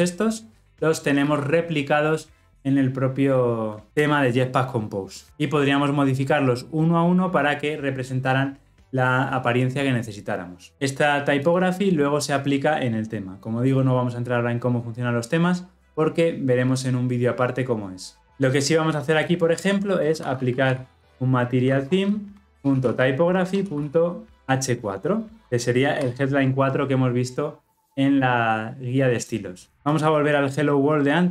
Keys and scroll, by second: 22.5 Return.